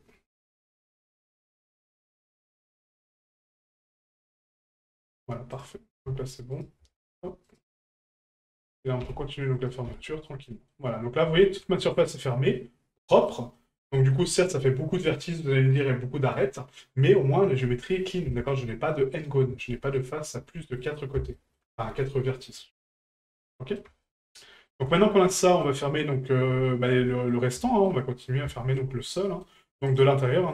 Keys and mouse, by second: 3.5 click, 5.5 right click, 6.5 right click, 7.5 shift+right click, 9.6 right click, 10.5 middle click, 11.4 shift+middle drag, 12.3-13.3 middle drag, 13.5 middle drag, 13.9 shift+middle drag, 15.2-15.8 middle drag, 17.5-18.0 middle drag, 18.3 shift+middle click, 19.3 middle drag, 19.9-20.3 shift+middle drag, 20.5 middle click, 21.3 shift+middle drag, 22.6 middle click, 23.6 middle drag, 24.0 shift+middle drag, 24.4 middle drag, 25.0 shift+middle drag, 25.4 middle drag, 26.6 shift+middle click, 27.1 middle click, 27.6 shift+middle click, 28.0 middle click, 28.5 shift+middle click, 29.2 middle click, 29.9 right click, 30.2 middle click.